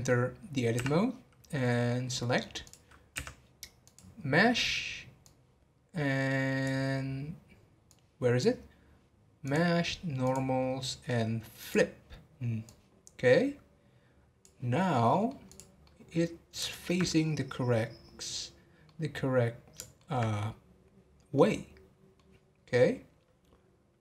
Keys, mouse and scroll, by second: 14.8 scroll down 1, 15.1-17.2 middle drag, 17.2 scroll up 4, 17.9 scroll down 3, 18.8-24.0 middle drag.